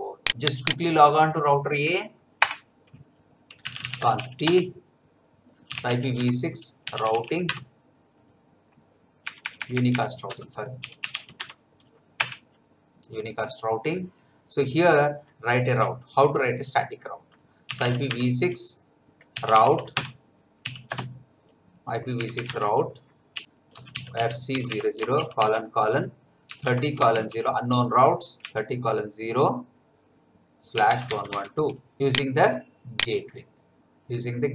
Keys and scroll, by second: 2.4 Return, 3.4-7.6 typing, 9.2 BackSpace, 10.3-11.6 typing, 12.2 Return, 17.4-20.9 typing, 22.2 BackSpace, 22.5 Tab, 23.4-25.2 typing, 26.2-27.1 typing, 28.4 0, 30.5-31.8 typing.